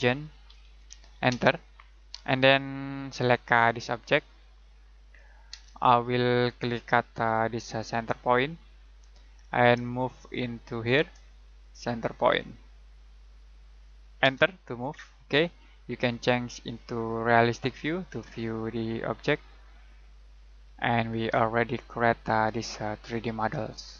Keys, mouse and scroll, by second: 0.0-1.3 typing, 2.6-4.4 scroll up 1, 4.4 click, 5.5 space, 6.4-8.7 scroll up 1, 8.8 click, 9.2-9.7 scroll down 1, 10.0 middle click, 11.2-13.0 scroll up 1, 13.0 click, 14.2 space, 15.0-15.9 scroll down 1, 16.7 click, 21.6 middle click.